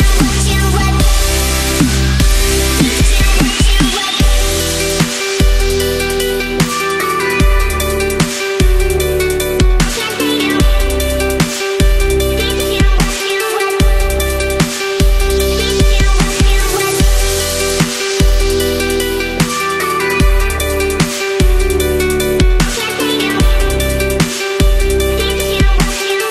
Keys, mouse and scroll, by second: 0.3 click, 0.6 space, 1.5-2.9 drag, 4.1-4.6 drag, 6.3-8.0 typing, 9.9 Left, 13.7-15.6 drag, 20.4 ctrl+z, 22.2 click, 24.1 click.